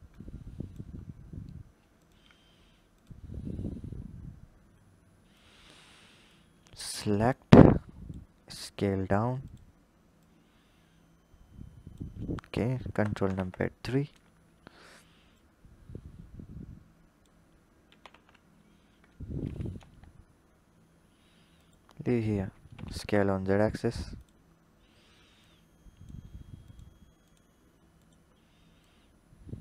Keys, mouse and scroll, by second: 0.8-1.7 scroll up 5, 1.7 click, 2.8 click, 3.1-4.6 scroll up 4, 4.6-6.2 drag, 8.2 s, 9.9 click, 13.0 ctrl+KP_3, 14.2-15.2 scroll up 1, 15.2 click, 17.7 s, 22.1-22.6 scroll down 2, 22.6 s, 24.3-25.2 scroll up 4, 25.2 drag, 26.5 click, 27.0 click, 27.8 click, 28.6 click.